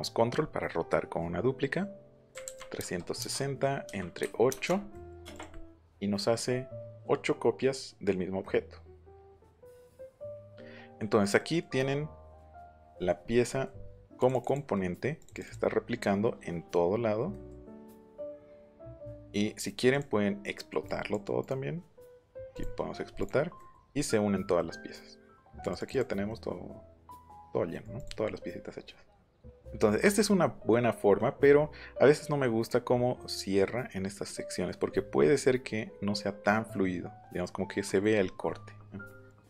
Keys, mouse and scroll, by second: 2.3 KP_3, 2.4 KP_6, 2.7 KP_0, 3.1 KP_Enter, 4.2 KP_8, 4.4 KP_Enter, 5.3 click, 11.7 middle click, 14.0 click, 14.2 click, 14.3 click, 14.7 middle click, 15.2 click, 17.3 middle click, 17.7 click, 18.1 middle click, 18.6 middle click, 19.9 click, 20.8 click, 21.4 right click, 22.5 click, 23.2 click, 23.5 middle click, 24.5 middle click, 25.6 click, 26.3 middle click, 27.9 click, 28.5 middle click, 28.5 scroll up 2, 29.5 ctrl+z, 31.1 middle click, 34.2 middle click, 37.4 middle click, 39.2 click.